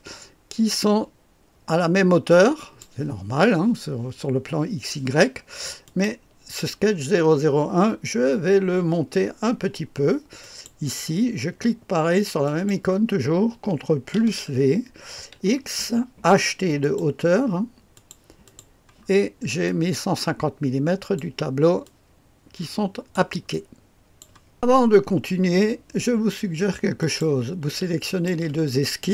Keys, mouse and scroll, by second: 5.8 click, 10.3 click, 12.4 click, 14.2 ctrl+v, 15.3 x, 16.7 click, 17.9-19.0 drag, 19.0-19.6 scroll down 1, 19.6-21.6 drag, 21.8-24.7 drag, 26.9 click, 28.0 ctrl+click.